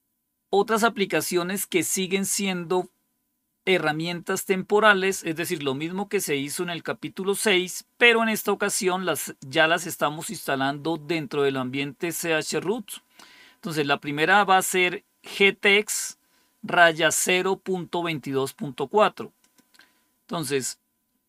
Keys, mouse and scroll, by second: 19.3-20.3 drag.